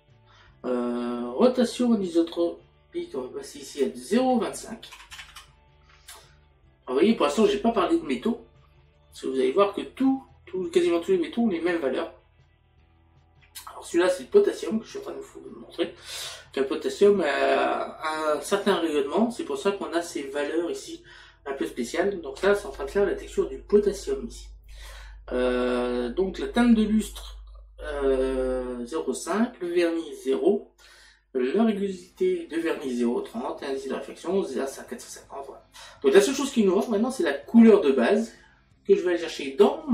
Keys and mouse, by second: 3.7 click, 4.9 KP_Decimal.